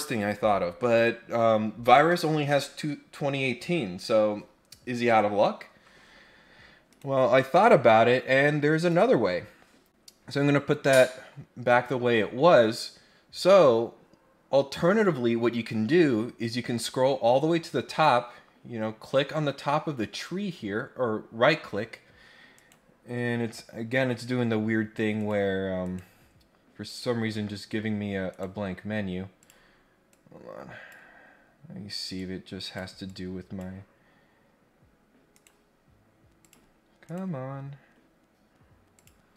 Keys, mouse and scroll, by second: 6.9 right click, 8.8 click, 15.7 scroll up 1, 20.1 right click, 22.5 right click, 25.1 click, 25.8 right click, 26.9 click, 28.3 right click, 29.3 click, 30.1 click, 32.1 click, 33.0 click, 35.3 right click, 36.4 click, 37.0 right click, 38.9 click.